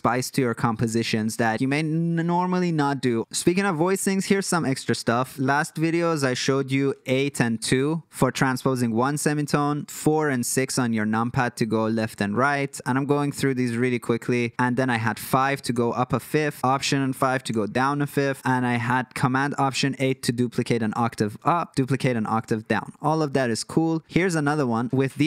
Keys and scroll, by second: 1.5 super+z, 2.1 super+z, 6.9-8.0 typing, 9.4-11.6 typing, 12.0 super+z, 14.9 KP_5, 15.6 super+z, 17.4 super+z, 19.1 alt+shift+KP_8, 19.9 super+z, 22.3 super+z.